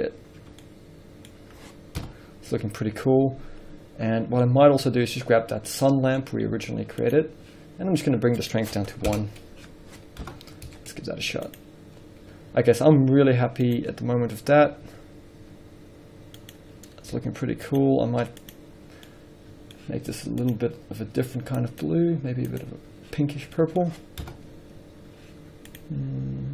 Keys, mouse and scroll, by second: 0.3 click, 0.5 scroll down 1, 1.1-1.5 middle drag, 1.6 middle click, 1.7 scroll up 1, 1.8 middle click, 2.3 KP_0, 4.4-5.0 middle drag, 4.4-4.8 scroll down 1, 5.0 scroll down 1, 5.2-6.1 middle drag, 6.1 click, 6.3 scroll down 1, 6.8 z, 6.9-9.4 middle drag, 9.4-14.3 drag, 9.6 Return, 10.5 KP_0, 12.0 z, 12.4 scroll up 1, 14.4-15.1 scroll up 1, 15.1 s, 17.0 click, 17.7 r, 18.2 click, 19.4 middle click, 21.9 click, 23.6 scroll down 1, 23.8 middle click, 24.6 KP_0.